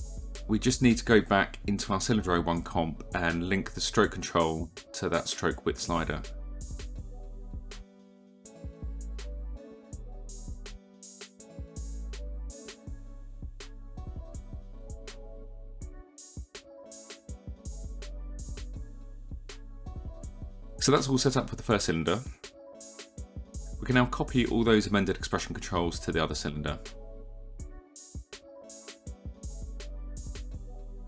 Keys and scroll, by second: 11.0 e, 25.3 ctrl+c.